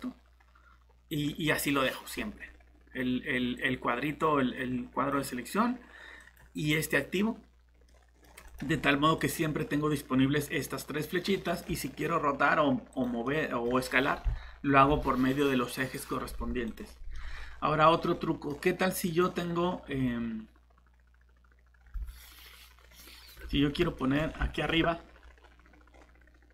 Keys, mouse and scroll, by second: 7.9 middle click, 8.5 click, 8.7-9.2 scroll up 1, 9.2 click, 11.2 middle click, 12.9 click, 13.2 middle click, 16.7 click, 17.1 middle click, 19.1 click, 19.6-23.0 scroll down 1, 24.0 middle click, 24.2 scroll up 1, 24.5 middle click, 25.9-26.5 scroll down 1.